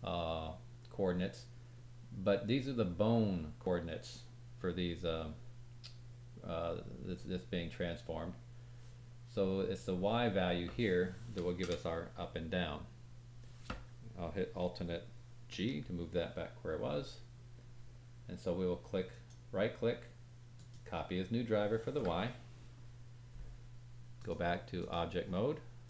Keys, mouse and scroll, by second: 15.5 alt+g, 19.1 right click, 24.1-25.8 drag, 24.1-25.8 middle drag, 24.1-25.8 right drag.